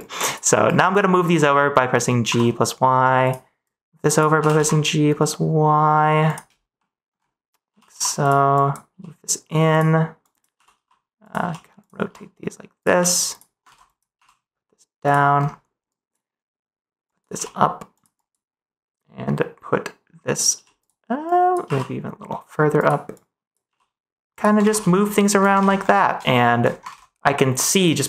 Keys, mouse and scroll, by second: 0.0 click, 0.6 click, 1.2 g, 2.2 y, 3.6 click, 4.3 g, 4.5 y, 6.2 click, 6.7 middle click, 7.6 g, 7.8 y, 8.1 click, 8.5 click, 8.8 g, 9.6 click, 10.2 click, 10.5-12.9 typing, 12.7 click, 13.2 click, 13.6 ctrl+s, 13.8 click, 14.1 g, 15.0 click, 15.9 click, 17.1 click, 17.3 g, 17.9 click, 18.1 click, 20.7 g, 21.3 click, 21.6 g, 22.7 click, 23.1 click, 23.6 g, 24.2 click, 24.6 ctrl+s, 24.9 middle click, 26.3 middle click.